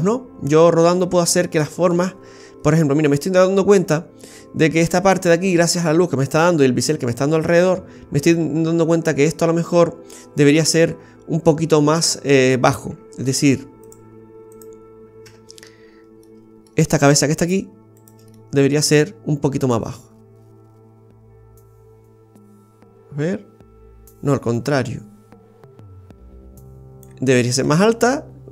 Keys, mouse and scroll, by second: 2.1-3.0 scroll up 3, 3.0 scroll up 1.